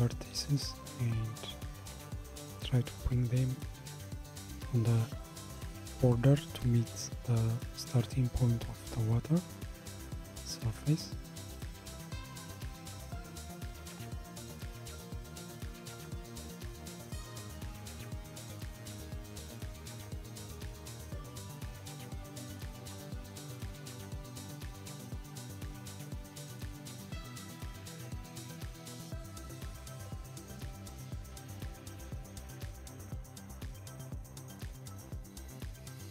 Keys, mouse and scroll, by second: 4.4 click, 5.9 g, 11.0 click, 12.0 g, 14.6 click, 15.7 g, 20.0 click, 21.2 g, 26.4-29.3 shift+middle drag, 29.3 click, 31.4 g.